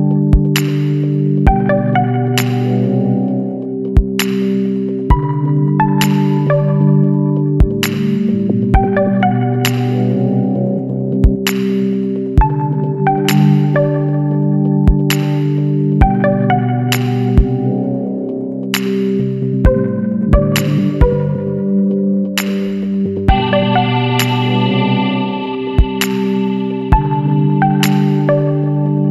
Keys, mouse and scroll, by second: 1.3 click, 2.9 click, 5.0 click, 6.4 click, 8.2 click, 9.7 click, 10.5 click, 11.7 click, 12.9 click, 14.6 KP_3, 14.9 KP_Enter, 17.2 click, 19.0 click, 20.3 click, 21.3 KP_3, 21.6 KP_Enter, 23.9 click, 25.9 click, 27.6 click.